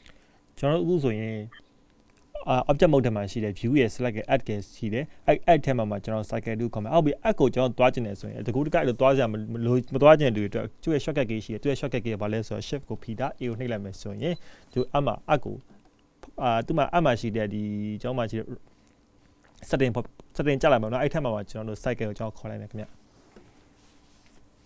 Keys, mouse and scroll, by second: 0.5-3.5 scroll down 3.